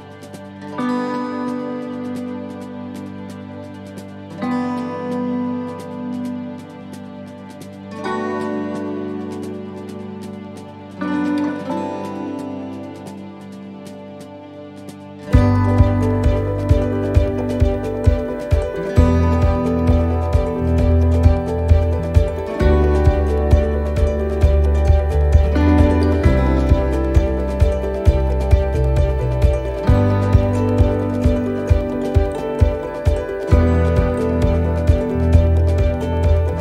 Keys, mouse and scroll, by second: 2.7 shift+d, 4.3 p, 6.8 click, 8.1 right click, 11.4-12.7 scroll down 3, 11.9 middle click, 13.0 g, 19.1 shift+middle click, 19.7-20.5 scroll up 4, 20.0 middle click, 20.6 shift+middle click, 21.1-21.7 scroll up 2, 21.7 shift+middle click, 22.5-23.0 scroll down 2, 23.3 g, 28.8 click, 30.1 right click, 30.8 l, 31.9 click, 34.8 middle click, 36.0 right click.